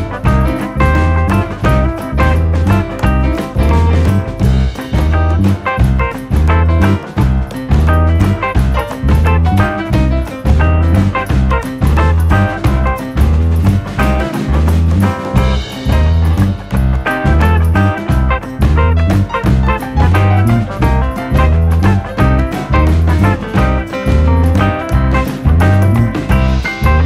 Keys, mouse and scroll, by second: 0.0 n, 0.0 scroll down 3, 0.1 scroll up 3, 0.4 middle click, 0.5 shift+middle click, 0.9 scroll up 21, 1.2 click, 1.9 click, 2.3 click, 2.4 scroll down 2, 2.5 middle click, 2.6 Tab, 2.7 middle click, 2.8 middle click, 3.0 middle click, 4.7 Tab, 4.9 shift+d, 5.4-5.8 click, 5.7 click, 6.0 click, 6.2-6.6 scroll down 2, 6.2 middle click, 6.8 click, 7.1 h, 7.2 click, 7.3 scroll up 3, 7.5 middle click, 8.4 ctrl+KP_3.